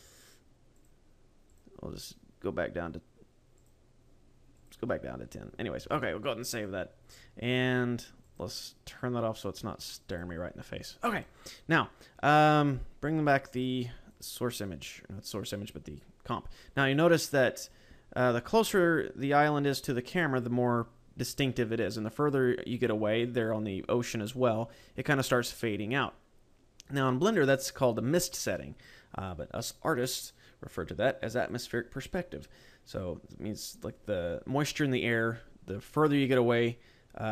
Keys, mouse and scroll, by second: 0.8 click, 1.6 click, 3.4 click, 4.4 click, 5.9 ctrl+s, 8.2 click, 10.0 click, 10.7 scroll down 2, 11.0 a, 11.6 scroll down 1.